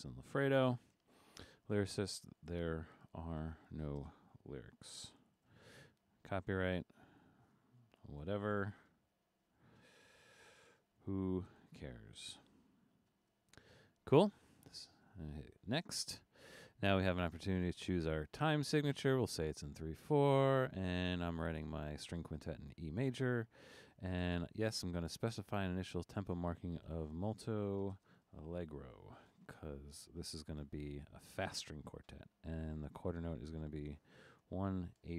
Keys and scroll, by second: 0.0-13.3 typing, 26.7-29.7 typing, 32.7 1, 33.1 6, 34.3 BackSpace, 34.9 8.